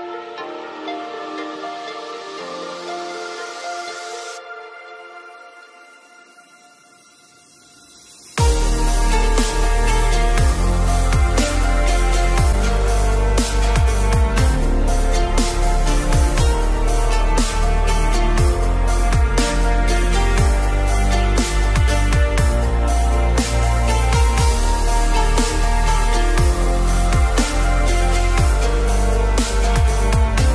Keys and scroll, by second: 0.9 ctrl+KP_Add.